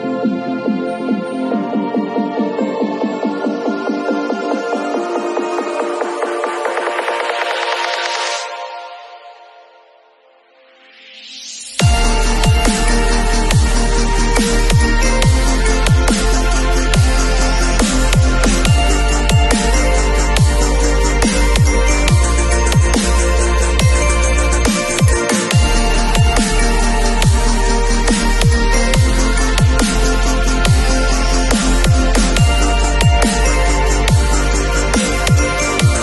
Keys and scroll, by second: 7.3 super+t, 20.0 super+t.